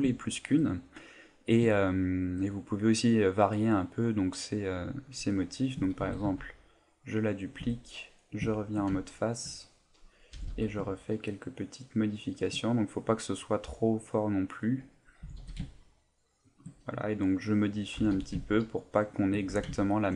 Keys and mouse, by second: 0.2 shift+middle click, 0.3 shift+middle click, 0.9 right click, 1.8 shift+middle click, 6.0 shift+d, 7.4 click, 7.7 Tab, 8.5 shift+middle click, 9.1 ctrl+middle click, 9.8 right click, 10.4 g, 12.4 shift+click, 12.9 middle click, 14.6 right click, 15.2 g, 16.5 shift+click, 17.4 right click, 18.0 g, 19.2 shift+click, 19.4 Tab, 19.7 ctrl+middle click.